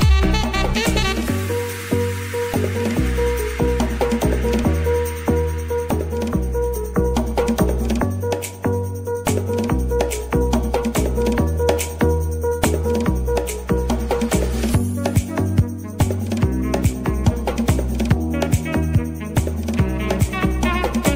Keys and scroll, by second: 3.0-5.3 typing, 5.5 Return.